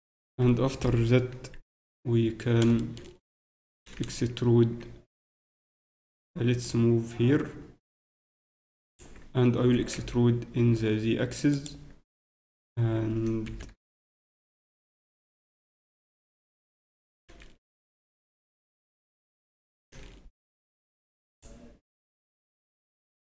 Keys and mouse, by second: 3.4 Tab, 3.8 a, 4.0 a, 6.6-8.6 drag, 9.6 e, 12.1 z, 12.8 z, 13.4 ctrl+KP_7, 13.9 z, 14.9 z, 16.8 z, 17.0 a, 17.4 a, 19.9 z, 19.9 a, 21.4 b.